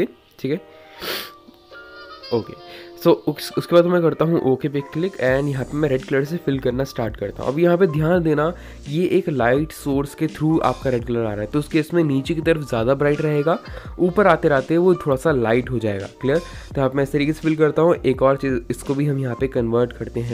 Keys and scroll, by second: 8.3-10.9 typing, 17.8 [, 18.0 [.